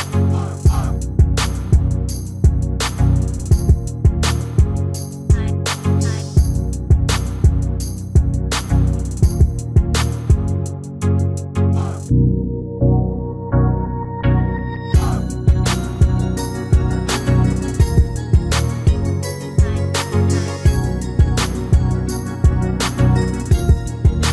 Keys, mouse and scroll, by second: 0.7-2.6 middle drag, 2.6 KP_3, 4.3-6.1 drag, 7.5-9.3 drag, 9.5-11.3 middle drag, 11.5-13.2 drag, 13.7 s, 18.1-19.8 drag, 20.0-21.8 middle drag, 21.5 s.